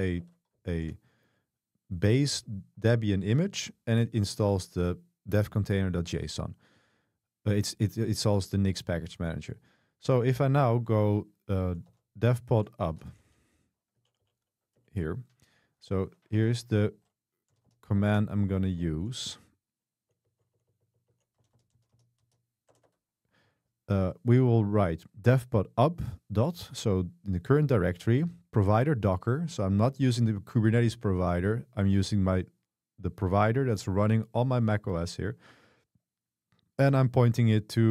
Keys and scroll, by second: 0.0-1.3 typing, 0.3 Escape, 11.9 ctrl+r, 12.3-13.8 typing, 14.3 Up, 14.4 Up, 14.8 Return, 16.4 Escape, 17.0 0, 17.6 x, 17.7 x, 18.1 Escape, 19.0-22.7 typing, 22.9 Escape.